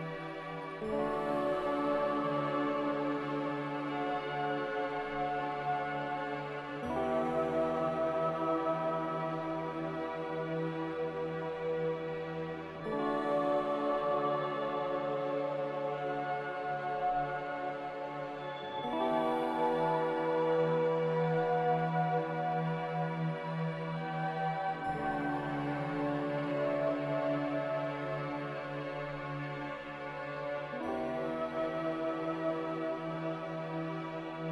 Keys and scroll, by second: 12.2 z, 16.7 s, 17.2 a, 21.9-23.4 typing, 26.5 Return, 29.7-30.9 typing, 32.6 a.